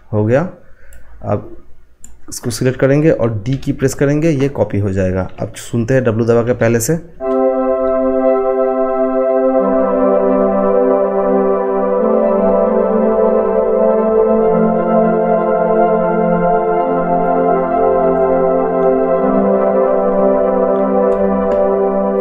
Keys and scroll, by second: 3.5 d, 6.3 w.